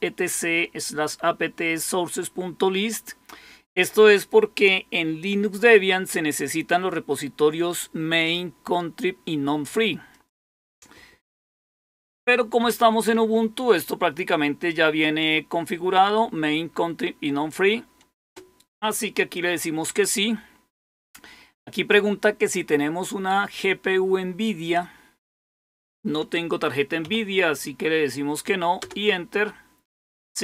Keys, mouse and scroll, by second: 5.1-8.2 drag, 10.0 click, 28.7 Return.